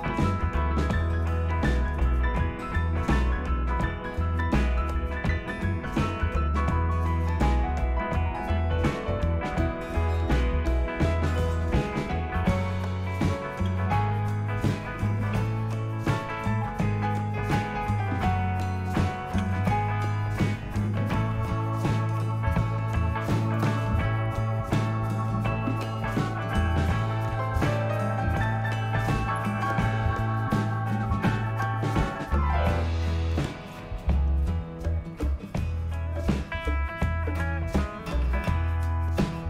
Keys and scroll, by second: 1.9 Down, 2.5 Down, 2.9-4.7 typing, 15.4 Tab, 19.4 Return.